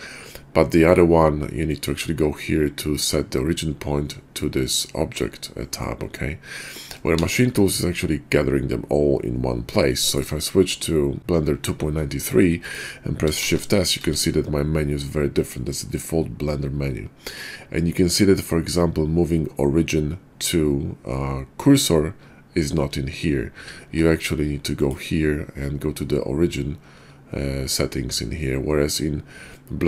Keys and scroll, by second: 7.1 shift+s.